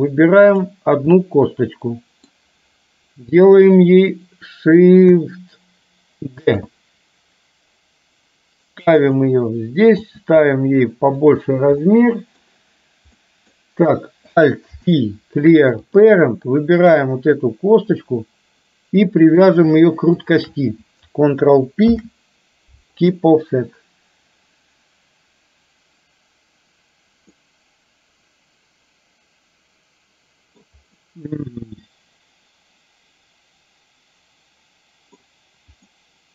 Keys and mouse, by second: 1.3-2.4 middle drag, 6.5 shift+d, 10.1 s, 11.9 middle click, 13.1 middle click, 14.8 alt+p, 16.8 click, 17.4-19.5 middle drag, 20.3 shift+click, 22.0 ctrl+p, 27.4-30.8 middle drag, 31.0-35.3 middle drag, 35.9-36.3 middle drag.